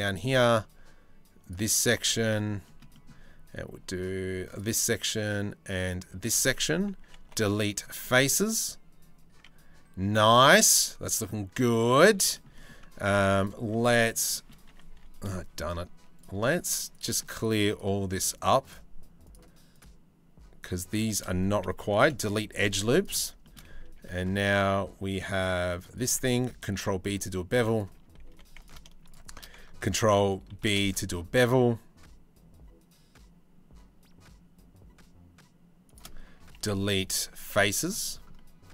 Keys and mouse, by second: 1.1 alt+shift+click, 1.9 shift+middle click, 6.9 Delete, 9.9 middle click, 10.2 Tab, 10.5-11.0 drag, 11.0-11.6 middle drag, 12.0 shift+middle drag, 13.2 Tab, 13.9 shift+middle click, 14.5 2, 21.6 Delete, 23.6 ctrl+r, 26.4 ctrl+b, 27.9 2, 30.2 ctrl+b, 36.2 Delete.